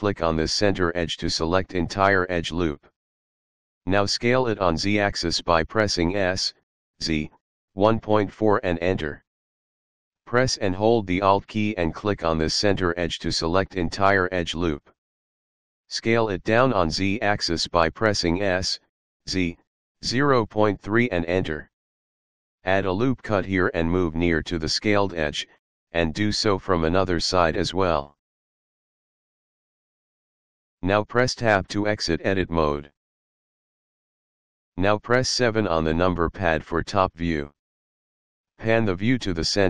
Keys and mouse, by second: 0.7 alt+click, 4.1 s, 5.0 z, 6.7 KP_1, 7.1 KP_Decimal, 7.5 KP_4, 8.6 Return, 12.8 alt+click, 15.5 s, 15.9 z, 17.9 KP_Decimal, 18.3 KP_3, 21.0 Return, 23.5 click, 25.6 click, 27.2 ctrl+r, 27.7 click, 29.9 click, 33.4 Tab, 35.7 KP_7, 37.4 shift+middle click.